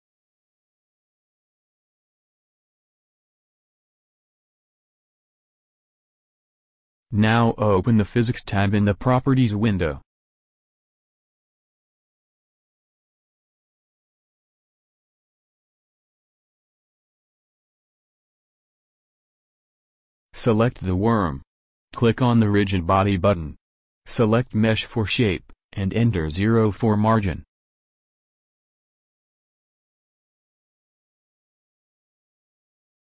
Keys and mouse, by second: 6.9-13.0 drag, 20.7-23.2 drag, 24.3-33.0 drag.